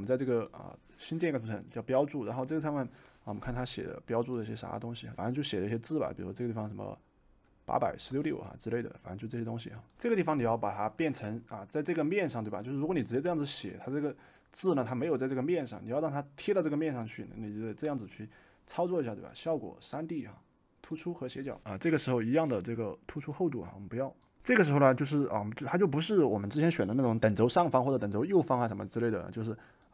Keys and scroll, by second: 9.9 Escape.